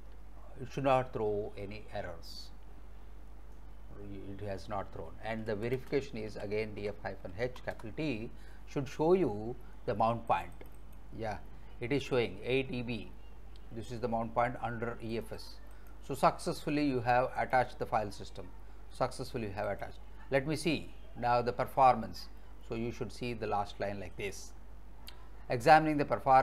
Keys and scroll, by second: 5.1-7.4 typing, 7.8 Return.